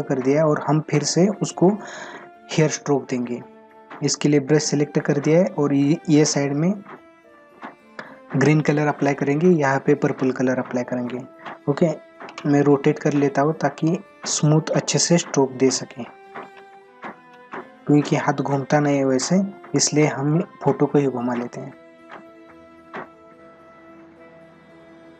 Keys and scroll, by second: 19.8 space.